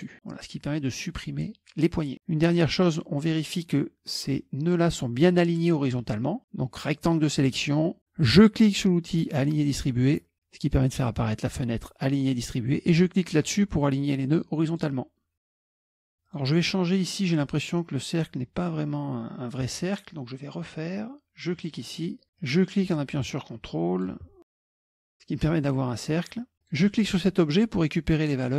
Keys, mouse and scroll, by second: 2.6-4.0 drag, 6.8 click, 9.5 click, 14.7 click, 15.6 click, 15.8 middle click, 16.3 click, 21.6 click, 22.0 scroll down 1, 22.4-24.2 drag, 25.0 middle click, 25.0 scroll up 1, 25.4 click, 26.6 click.